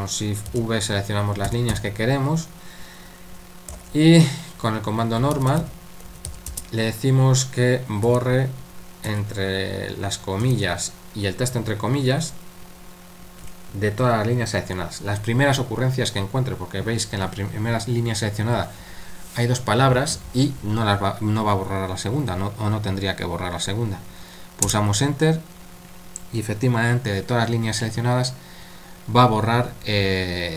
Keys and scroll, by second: 0.5-2.2 typing, 3.7 typing, 5.0-6.7 typing, 8.0 typing, 9.1 typing, 10.4 typing, 24.6 Return.